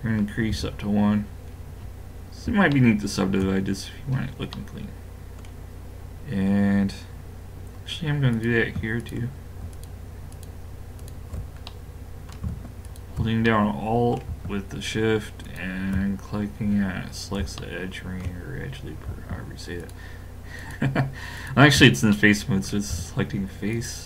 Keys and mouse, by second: 0.5 a, 1.0-3.0 middle drag, 8.3-13.5 drag, 11.7 middle click, 13.5-15.5 middle drag, 15.5 click, 16.3-17.3 middle drag, 17.3 click, 19.8-22.1 drag, 22.1-23.2 middle drag, 23.7-24.0 middle drag.